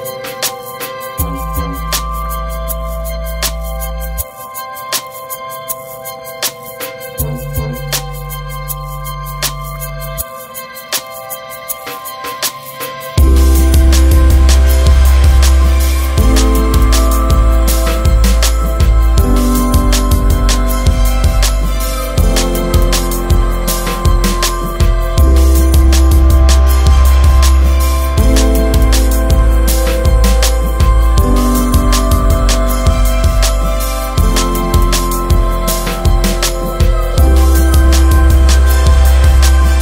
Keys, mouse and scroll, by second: 0.9-1.3 scroll up 1, 4.2 click, 6.1 right click, 6.2 scroll down 1, 6.5 right click, 7.8 click, 10.5 scroll up 1, 11.4 click, 11.9 right click, 13.9 click, 15.2 right click, 16.4 shift+right click, 19.6-20.2 scroll up 1, 20.2 right click, 25.1 2, 26.9 right click, 29.5 scroll down 1, 30.5 right click, 36.1 scroll down 1, 37.9 click, 38.4 right click.